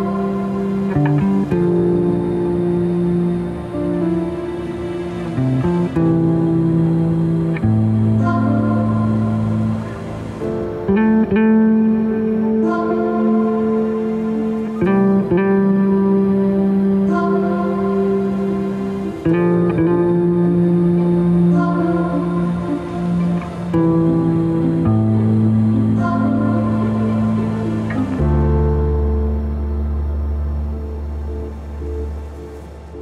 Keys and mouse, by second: 4.5-5.3 middle drag, 5.9 Tab, 7.0-8.0 shift+middle drag, 8.7-10.0 middle drag, 17.8 ctrl+z, 18.2 ctrl+z, 20.5 ctrl+b.